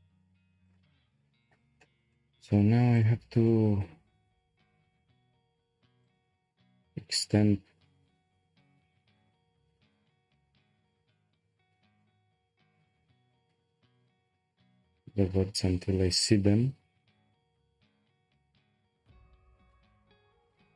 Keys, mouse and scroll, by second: 0.0 1, 0.7 click, 1.4 shift+click, 1.8-2.9 middle drag, 2.9 shift+click, 3.5-6.0 middle drag, 6.0 click, 8.0 g.